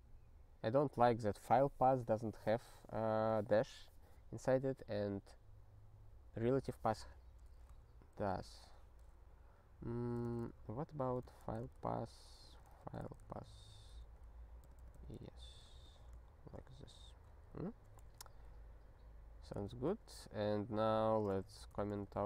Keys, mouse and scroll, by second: 8.3 alt+%, 10.1-11.9 typing, 13.9 h, 15.1 alt+y, 15.9 ctrl+s, 16.3 ctrl+n, 17.5 ctrl+n, 19.6 ctrl+p, 19.9 ctrl+p, 20.4 ctrl+a, 20.5 ctrl+n, 21.4 ctrl+alt+@, 21.6 alt+;, 22.1 ctrl+s.